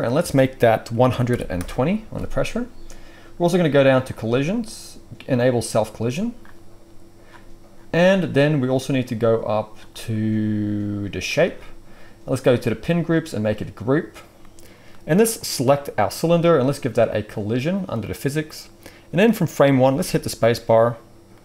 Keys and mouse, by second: 5.4-11.2 right drag, 11.2-15.4 middle drag, 15.4-17.0 right drag, 17.0-19.1 middle drag, 18.7-19.1 drag, 18.7-19.1 right drag, 19.9 space.